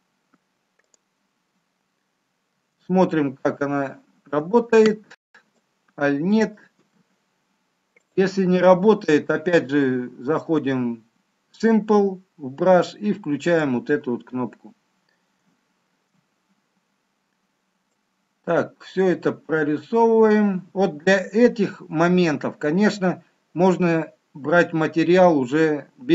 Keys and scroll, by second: 2.8 shift+z, 4.8 shift+z, 6.8 shift+z, 15.8 shift+z.